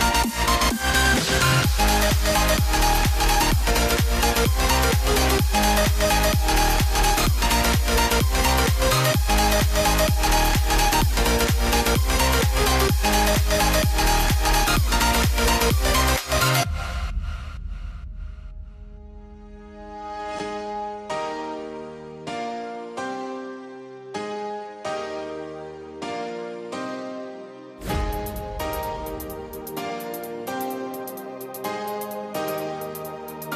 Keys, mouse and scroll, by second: 8.2 BackSpace, 10.0 click, 10.8 BackSpace, 12.7 click, 13.6-14.3 scroll down 1, 14.3 typing, 14.4 click, 16.8 typing, 17.1 click, 17.6-23.3 drag, 26.3 click.